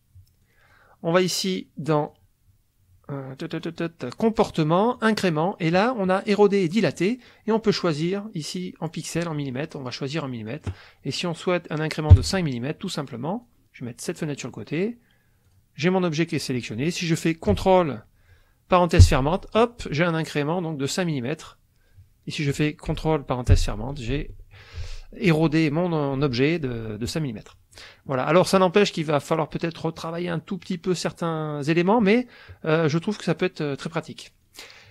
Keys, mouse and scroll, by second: 0.5 click, 2.1-3.8 drag, 4.2 click, 4.9 click, 7.3 click, 8.0 click, 9.6 click, 10.5 click, 12.1 KP_5, 13.4 click, 15.5 click, 19.0 ctrl+), 23.5 ctrl+(, 28.2 click, 28.3 scroll up 1, 28.4 click, 33.0 click, 33.0 scroll up 1, 33.2 click.